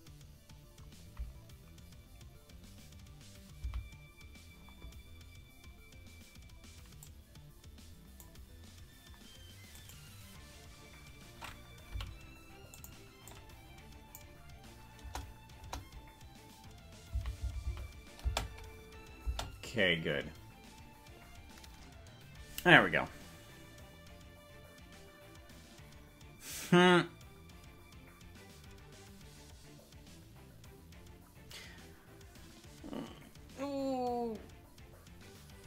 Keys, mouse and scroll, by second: 0.1 Right, 3.9 Right, 5.7-6.1 scroll down 3, 7.0-8.3 drag, 9.9 right click, 11.9 g, 13.3 click, 15.1 KP_0, 15.7 KP_0, 17.3 Right, 17.7 Right, 17.9 Right, 18.3 space, 19.5 space, 20.1-20.9 scroll up 4, 21.9 scroll down 1.